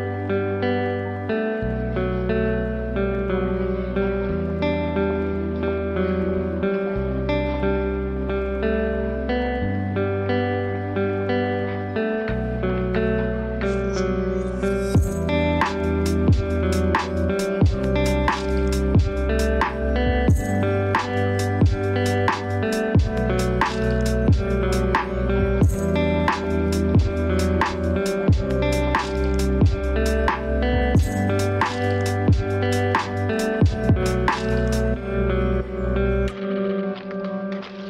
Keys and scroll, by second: 36.2 ctrl+space.